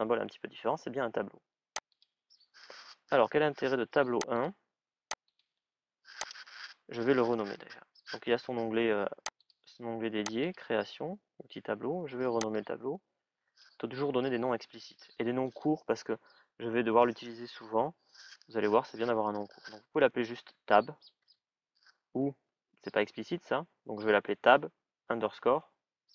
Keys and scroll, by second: 19.9-21.5 typing.